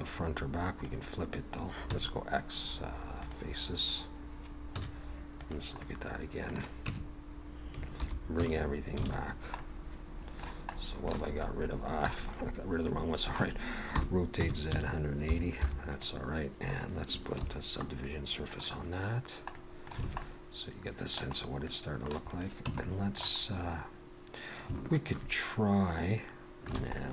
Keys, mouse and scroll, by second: 1.9 x, 4.8 z, 5.8 middle click, 6.8 Tab, 8.0 alt+h, 9.1 alt+a, 9.2-9.5 scroll down 3, 9.5 middle click, 10.7 middle click, 11.3-12.0 scroll up 3, 11.6 middle click, 12.2 click, 12.9 middle click, 14.0 r, 17.4 ctrl+2, 18.0 middle click, 19.5 middle click, 20.0 alt+a, 20.2 middle click, 21.3-21.6 scroll up 1, 21.6 middle click, 22.3 click, 22.7 Tab, 22.8 middle click, 24.9 alt+shift+click, 26.4 middle click, 26.8 alt+a, 26.9 middle click.